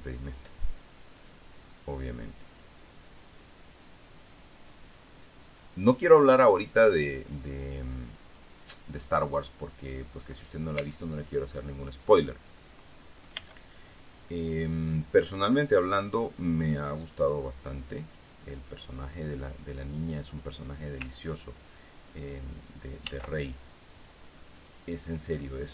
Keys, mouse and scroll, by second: 1.1 middle click, 1.7-3.3 drag, 4.0-5.7 drag, 6.1-7.4 drag, 8.0-9.5 drag, 11.3 a, 13.9 b, 14.4 click, 15.3 middle click, 16.0-18.9 drag, 18.9-21.5 middle drag, 23.6 ctrl+r, 24.5 click, 25.1 click.